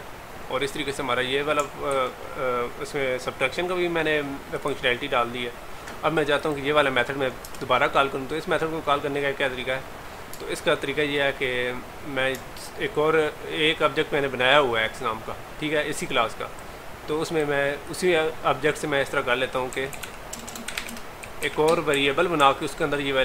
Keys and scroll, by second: 2.0 ctrl+s.